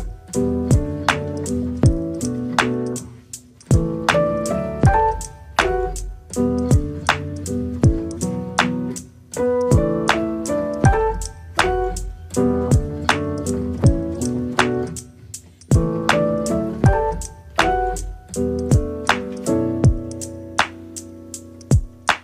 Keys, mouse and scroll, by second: 1.8-3.4 drag, 3.4 scroll up 1, 3.6 scroll down 3, 3.7 Tab, 4.0 middle click, 4.9 click, 5.7 click, 6.0 click, 8.9-10.1 middle drag, 11.0 KP_Divide, 11.5 middle click, 11.8-12.2 scroll up 7, 12.2-15.9 middle drag, 17.7-18.2 scroll up 1, 18.2-19.2 middle drag, 19.2 click, 19.6 middle click, 19.9-20.4 scroll down 2, 20.4-21.8 middle drag, 21.8 click.